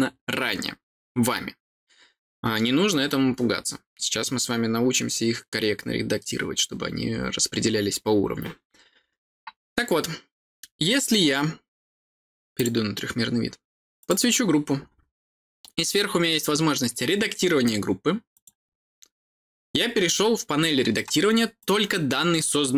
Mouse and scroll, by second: 12.5 click, 13.9 click, 18.3 click, 21.5 click.